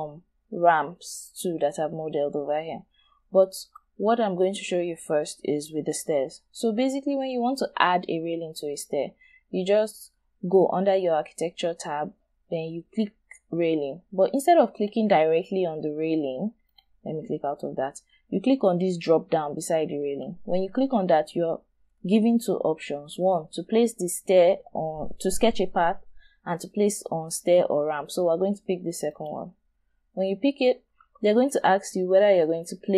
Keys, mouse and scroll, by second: 1.8-2.5 scroll down 1, 2.5-2.9 scroll down 1, 3.2-6.2 scroll up 1.